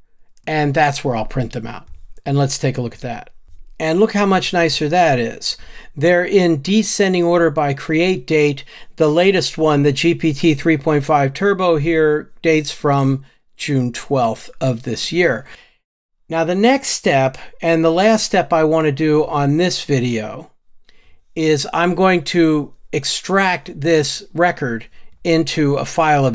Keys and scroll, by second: 20.5 ctrl+alt+o.